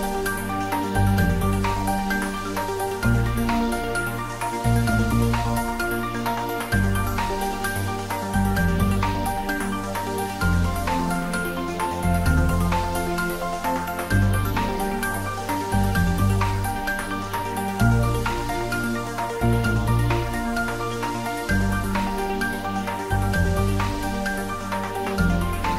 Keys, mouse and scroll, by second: 1.4 Left, 3.4 Left, 4.1 \, 8.9 click, 10.7-11.0 typing, 12.5 Return.